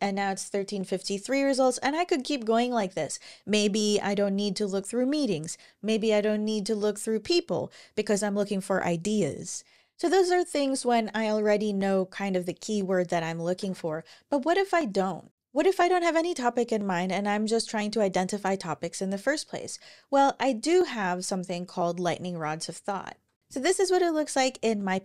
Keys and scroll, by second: 13.3 ctrl+super+l, 22.2 super+`, 22.9 super+o, 22.9-23.8 typing.